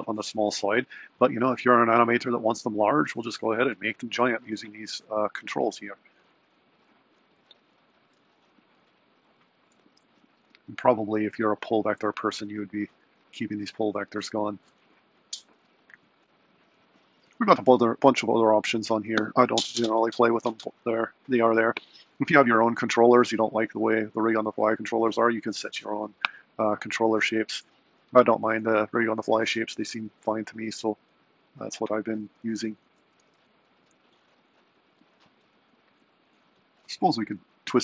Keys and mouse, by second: 24.9 click, 26.5 click, 30.4 click, 33.3 r.